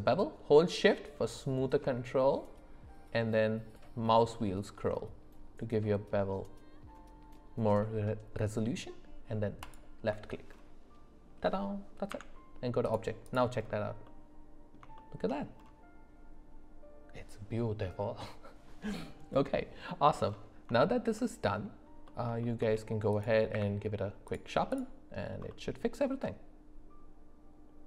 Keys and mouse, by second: 12.1 Tab, 13.3 click, 14.0 middle click, 15.0 shift+middle drag, 19.3 middle click, 20.8-21.1 shift+middle drag, 22.0 middle click, 22.4 shift+middle drag, 23.1 click, 23.5 q, 25.5-27.8 middle drag.